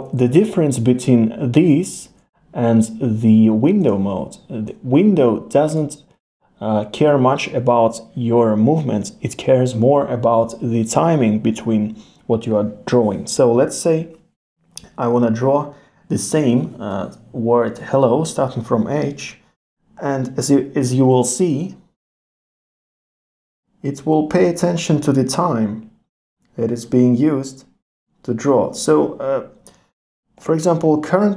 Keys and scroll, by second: 2.0 super+z.